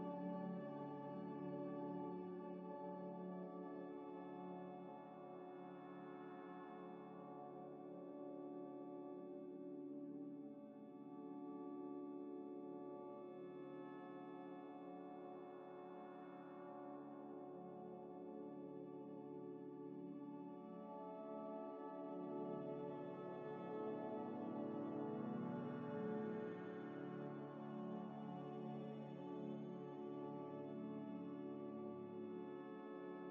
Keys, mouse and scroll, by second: 0.1 Tab, 0.4 3, 0.9 scroll down 1, 1.5 scroll down 1, 1.5 alt+Tab, 4.0 double click, 5.2 alt+Tab, 8.0 scroll down 1, 9.2 F3, 9.6-10.0 typing, 10.4 Return, 11.6 double click, 12.9 double click, 14.7 scroll, 14.7 scroll up 1, 15.9 scroll down 1, 16.8 Tab, 17.1 a, 18.9 Tab, 20.5 double click, 23.8 u, 26.0 middle click, 27.6 middle click, 27.8 ctrl+shift+click, 29.6 scroll up 1, 31.6 middle click, 32.0 scroll up 1.